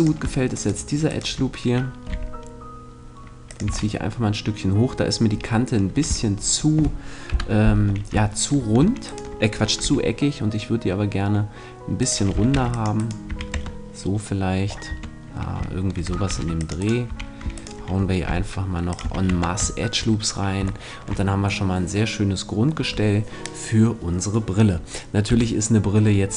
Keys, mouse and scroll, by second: 2.1 g, 3.7 click, 3.7 a, 3.9-5.5 middle drag, 7.3 KP_1, 7.9-9.1 middle drag, 9.1-10.8 right drag, 9.8 g, 12.1-13.3 drag, 12.5 ctrl+r, 13.2 right click, 13.3 a, 13.5 Tab, 14.9 Tab, 16.3 ctrl+r, 16.9-19.5 right drag, 17.1 a, 18.3 g, 18.9 click, 19.0 a, 19.3 Tab, 25.3 KP_7.